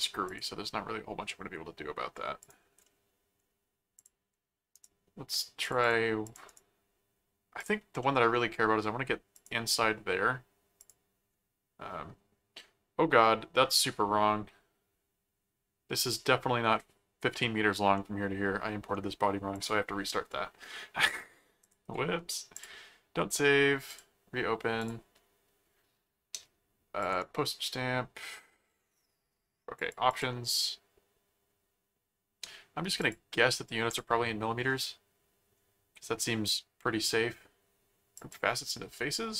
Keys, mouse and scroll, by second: 0.2 click, 0.6-2.0 middle drag, 2.4 click, 2.8 middle click, 3.9 click, 4.7 right click, 5.6 click, 6.5 right click, 7.6 click, 8.0 middle click, 9.3 click, 10.8 click, 17.9 middle click, 19.5 click, 21.6 click, 22.5 click, 23.9 click, 24.8 click, 27.0 click, 27.1 right click, 29.7 click, 33.0 click, 33.9 click, 38.2 click.